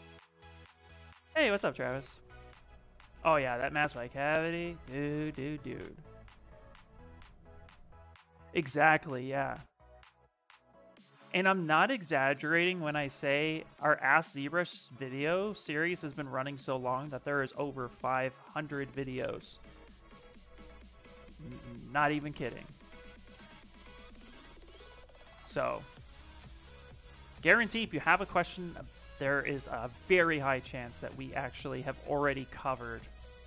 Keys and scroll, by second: 10.7 s.